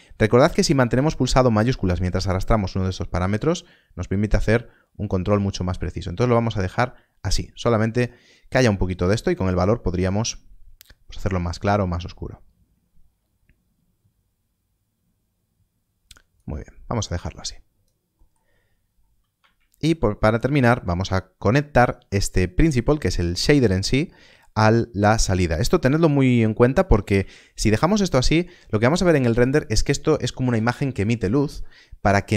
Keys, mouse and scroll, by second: 1.3 shift+click, 9.3 shift+click, 17.2 click, 18.1 middle click, 18.4 scroll down 1, 22.3 click, 24.9 click, 25.1 scroll up 1, 25.5 middle click.